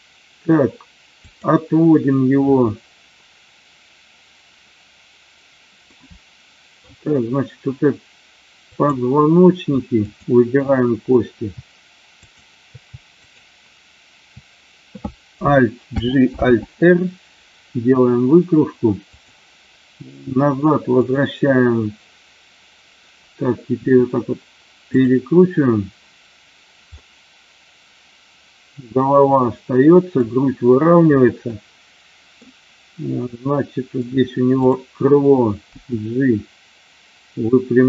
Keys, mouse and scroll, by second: 1.1 click, 5.9-6.8 middle drag, 8.5 click, 9.9 shift+click, 12.1 shift+click, 15.9 alt+g, 16.3 alt+r, 19.0 click, 20.9 click, 23.8 r, 26.9-30.1 middle drag, 31.5 middle click, 33.2 middle click, 34.6 click, 35.7 g.